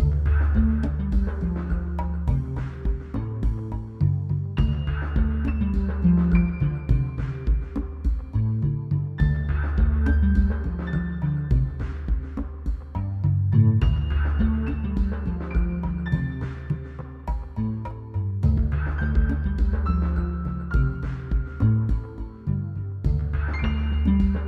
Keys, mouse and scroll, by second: 2.0 right click, 5.1-5.6 drag, 8.5 click, 11.1 click, 12.8 Right, 16.0 Left, 16.7 BackSpace, 20.5 click.